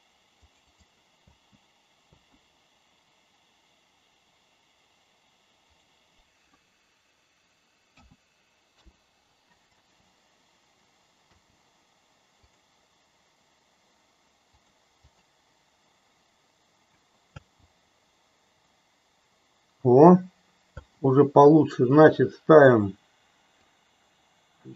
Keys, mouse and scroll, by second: 0.5 click, 1.2 space, 2.4 space, 5.7-9.3 drag, 9.6 space, 11.5 space, 12.5-14.7 drag, 15.1 click, 17.4 space, 20.9 space, 23.6-24.7 drag.